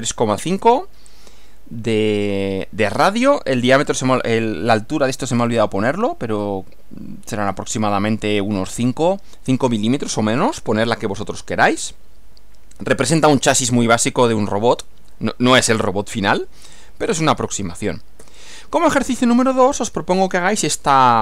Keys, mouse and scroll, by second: 18.2 Right.